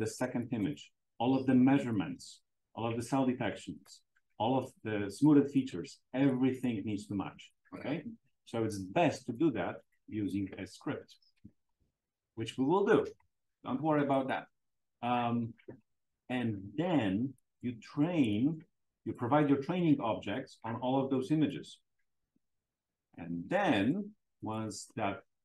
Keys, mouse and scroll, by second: 0.0 click, 0.5-1.8 right drag, 1.8 click, 3.7 click, 5.2 click, 6.2-7.5 drag, 9.7 click, 10.2 click, 11.0-13.2 typing, 14.2 click, 15.4-16.5 drag, 23.0-25.4 drag.